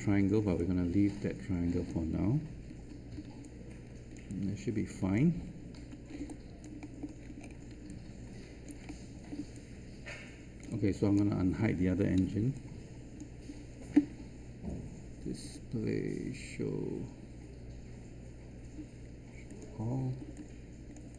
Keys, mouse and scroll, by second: 0.2 scroll down 1, 0.5-1.8 alt+drag, 2.7 alt+3, 3.4 alt+click, 4.2 alt+click, 5.7 alt+1, 6.0-6.6 scroll down 1, 6.8 alt+middle click, 8.1 alt+click, 8.8 alt+middle click, 9.5-11.1 alt+drag, 12.1 alt+q, 12.5-13.8 right drag, 15.3 click, 20.3-21.1 alt+drag.